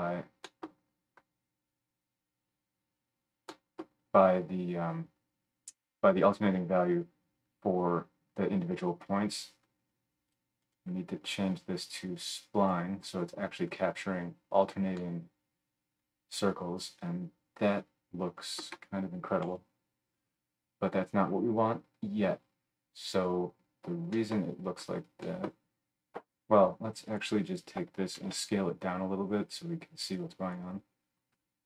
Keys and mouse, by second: 10.3 middle click, 10.6-27.2 drag, 19.4 KP_7, 27.2 middle drag, 27.5 click, 27.6-30.1 shift+middle drag, 28.2 shift+d, 30.1-31.6 drag.